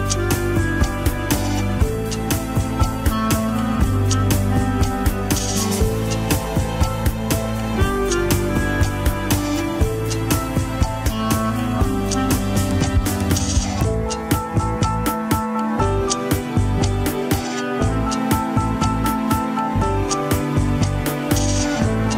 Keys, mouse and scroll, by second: 2.8-3.6 scroll down 10, 3.6 ctrl+Tab, 4.1 ctrl+s, 4.3 click, 5.3 click, 8.2 click, 8.8-9.2 scroll up 7, 9.8 scroll up 3, 10.7 click, 11.2 click, 12.0 click, 12.4-13.1 scroll down 4, 13.1 ctrl+Tab, 13.5 a, 14.3 alt+g, 14.4 click, 15.0 scroll up 1, 15.3 shift+middle click, 15.6 scroll up 2, 16.2 g, 18.2 click, 18.9 g, 20.4 click, 21.3 g.